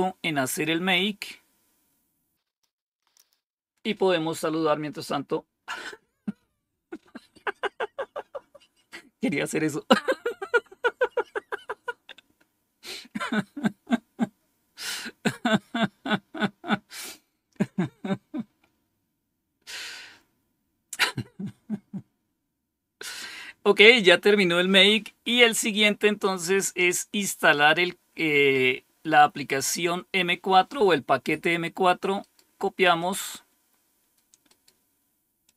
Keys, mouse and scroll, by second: 2.0-2.4 scroll down 1, 27.2-29.7 drag, 32.1 right click, 32.9 click, 34.4 right click, 35.4 click.